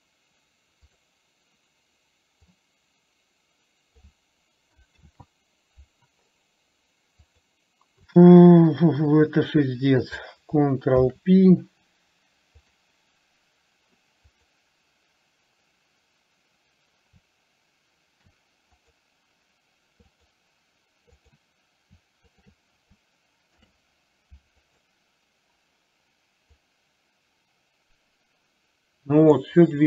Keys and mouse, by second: 1.3 click, 2.8-4.4 drag, 5.4 ctrl+z, 7.5 click, 9.4 shift+click, 11.3 ctrl+p, 19.3 click, 20.5 click, 21.7 click, 22.8 shift+click, 23.9 ctrl+p, 27.0-29.8 drag.